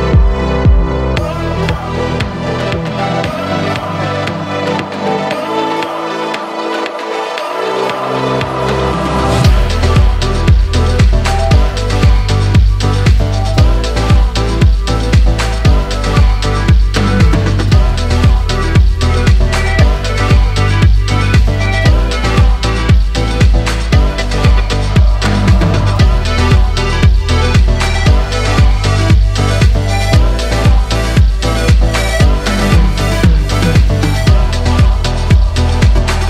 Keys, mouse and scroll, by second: 1.1 alt+shift+click, 2.3 s, 5.0-8.1 middle drag, 8.5 3, 9.2 click, 9.8-11.4 middle drag, 11.4 shift+click, 12.0-14.1 middle drag, 14.1-15.0 scroll up 1, 15.0 i, 17.7-18.8 middle drag, 18.8 ., 23.0 e, 25.2-27.8 middle drag, 27.8 click, 28.3 shift+middle click, 29.2 scroll up 1, 30.5 ctrl+r, 34.5-36.2 shift+middle drag.